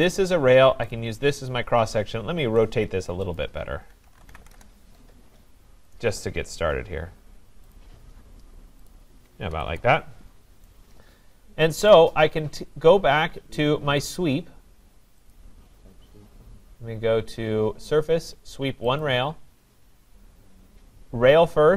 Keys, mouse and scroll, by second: 0.0 click, 0.9 click, 2.0 scroll, 2.4 Escape, 3.3 click, 3.7-4.9 typing, 5.9 click, 7.1 scroll, 7.8 click, 8.9 click, 9.6 Escape, 9.7 Escape, 9.9 Escape, 10.2 scroll down 4, 11.9 right click, 14.0-14.8 scroll, 15.3 click, 19.0 click.